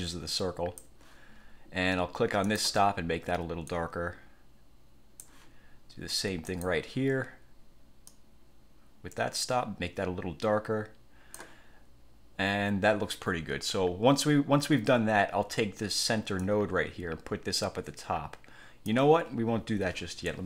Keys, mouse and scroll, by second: 2.6 click, 3.8-5.6 drag, 6.6 click, 8.2-11.7 drag, 16.5-19.2 drag.